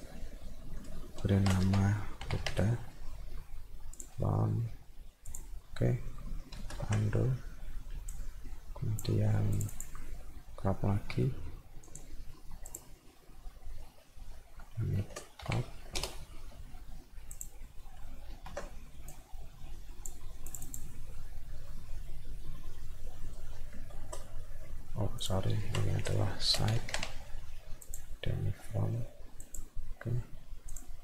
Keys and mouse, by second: 4.0 click, 5.3 click, 8.1 click, 9.6 click, 9.7 click, 11.9 click, 12.7 click, 17.3 click, 19.1 click, 20.5 click, 20.7 click, 25.2 click, 27.9 click, 29.4 click, 30.7 click.